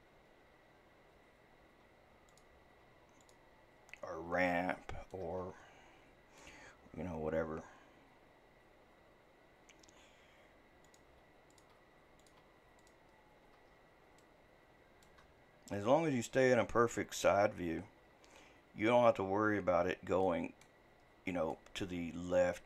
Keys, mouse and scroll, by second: 1.7 e, 2.6 e, 4.5-7.6 shift+middle drag, 9.8 e, 11.1 e, 11.6 e, 12.3 e, 14.1 shift+scroll down 1, 14.2-17.2 shift+middle drag, 20.2-22.6 middle drag.